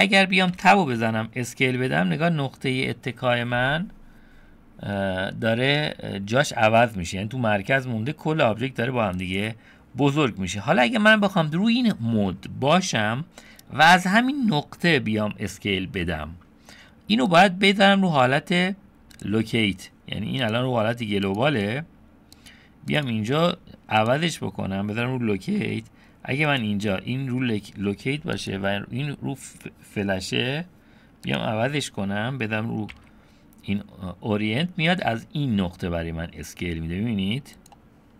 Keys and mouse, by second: 0.6 Tab, 1.0 s, 13.4 middle click, 17.3-19.7 drag, 20.4-22.4 drag, 23.0-24.3 drag, 25.6 s, 28.5-31.4 drag, 32.9 s.